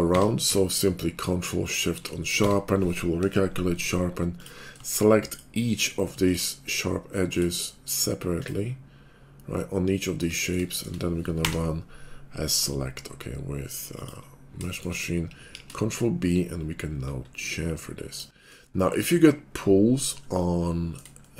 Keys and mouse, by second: 0.1 q, 2.4 Tab, 4.8-8.5 shift+drag, 11.4 y, 15.5 ctrl+b, 16.7-18.4 shift+drag, 18.4-20.6 middle drag, 20.7 middle click, 21.1 shift+click.